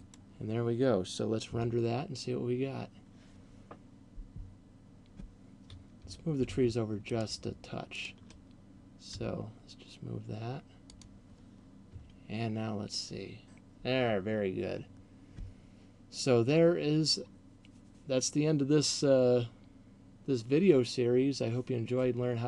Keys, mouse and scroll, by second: 0.2 click, 5.9 Escape, 7.2 right click, 7.9 shift+right click, 9.2 g, 10.9 click.